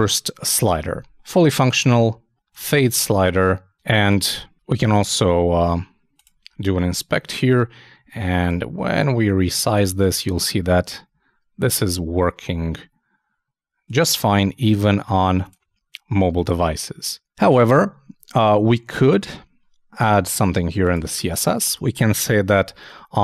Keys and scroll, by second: 19.0 super+Tab.